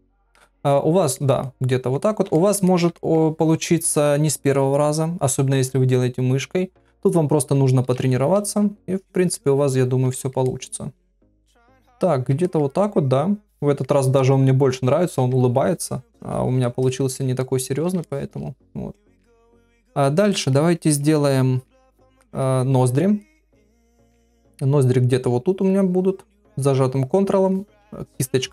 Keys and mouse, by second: 0.0 click, 0.4 middle click, 1.1 ctrl+middle click, 1.4 middle click, 2.4 ctrl+middle click, 2.7 middle click, 3.0 ctrl+middle click, 10.1 ctrl+middle click, 10.5 middle click, 11.2 ctrl+middle click, 11.5 ctrl+middle click, 11.9 middle click, 12.5 ctrl+middle click, 12.7-13.8 middle drag, 14.2 middle click, 16.9 middle click, 17.4 ctrl+middle click, 18.0 shift+middle click, 19.3 middle click, 19.8 middle click, 20.3 shift+middle click, 21.6 click, 22.2 middle click, 23.2 middle click, 25.8-27.3 ctrl+drag.